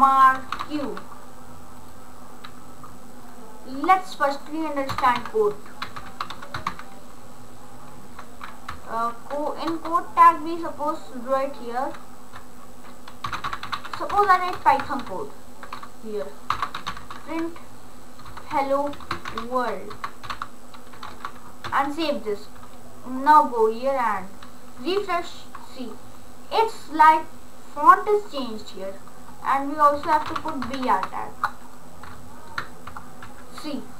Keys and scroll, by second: 0.0-1.1 typing, 5.0 Return, 5.2-7.2 typing, 9.7 Return, 13.1-21.7 typing, 14.7 Left, 29.9-31.2 typing, 32.6 Return, 33.2 ctrl+s.